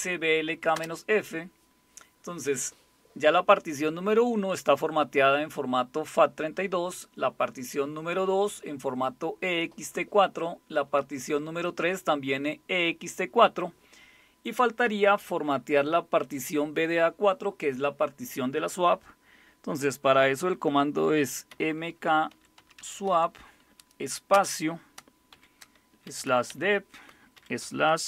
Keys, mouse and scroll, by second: 0.7 Return, 20.7-23.1 typing, 24.3-27.4 typing.